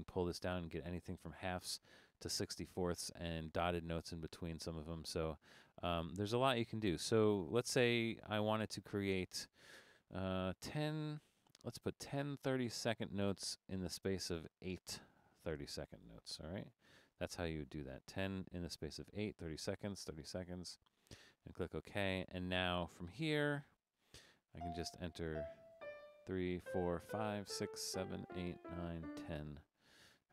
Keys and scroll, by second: 10.5-11.5 typing, 15.2 8, 23.5 Up, 23.7 Up, 23.9 Up, 24.6 2, 25.6 Down, 25.8-29.0 typing, 26.5 Down, 26.9 Down, 27.3 Down, 27.7 Down, 28.1 Down, 28.5 Down, 28.8 Down.